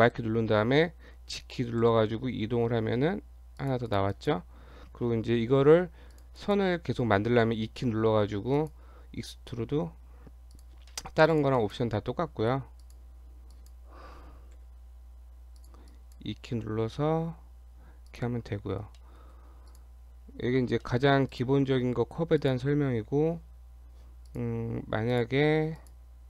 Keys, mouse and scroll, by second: 1.8 g, 3.9 click, 4.2 click, 6.2 click, 6.4 click, 7.3 e, 9.6 e, 10.9 shift+middle click, 11.3 click, 11.6 click, 12.2 e, 13.6 click, 14.6 g, 15.9 click, 17.3 e, 18.5-19.0 scroll down 2, 19.0 shift+middle click, 19.7 click, 20.9 shift+middle click, 21.3 click, 22.1 Tab, 22.4 click, 22.6 Tab, 24.3 click, 25.1 click, 25.4 Tab, 25.8 click.